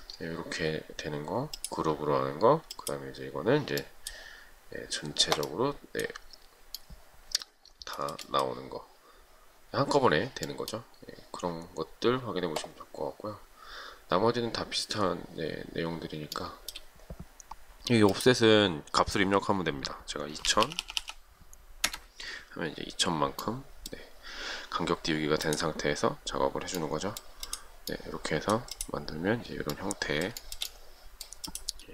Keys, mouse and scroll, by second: 8.2 shift+middle click, 16.6 shift+middle click, 20.5-21.6 typing, 22.0 Return, 30.7 shift+middle click.